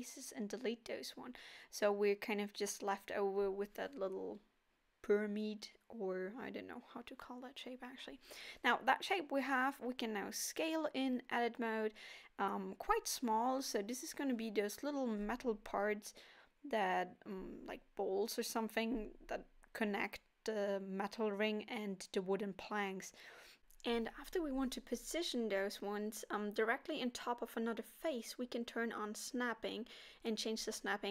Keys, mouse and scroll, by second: 0.5 z, 2.0 click, 3.6 Tab, 4.5 Tab, 5.6 a, 6.3 s, 8.7 o, 9.2 s, 10.9 middle click, 11.4 scroll up 3, 12.0 middle click, 13.6 s, 15.3 KP_7, 16.9 g, 18.6 s, 20.3 g, 30.6 middle click.